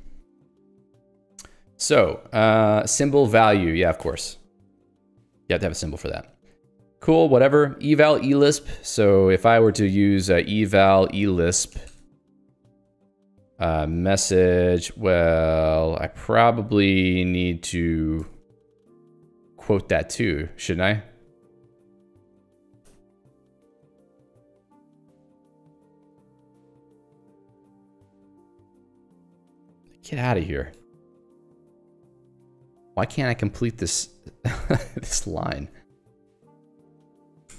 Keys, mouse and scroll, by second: 0.2 Escape, 0.4 ctrl+g, 0.9 Escape, 1.9 j, 2.8 l, 5.4 ctrl+g, 5.6 Escape, 6.4 j, 9.1 click, 9.5-15.2 typing, 9.7 Return, 18.2 Escape, 19.1 scroll down 1, 21.7 click, 21.8-31.3 typing, 22.2 Escape, 29.8 Escape, 32.7 Escape, 33.2 ctrl+g, 33.9 a, 34.6 Escape, 36.4-37.5 typing.